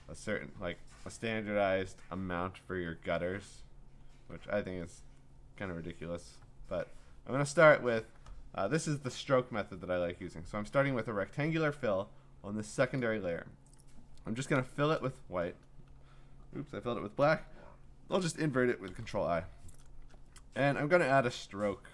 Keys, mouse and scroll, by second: 0.8-1.7 scroll, 14.3 scroll, 14.5 alt+BackSpace, 18.9 ctrl+i, 20.0 ctrl+d, 21.2 click.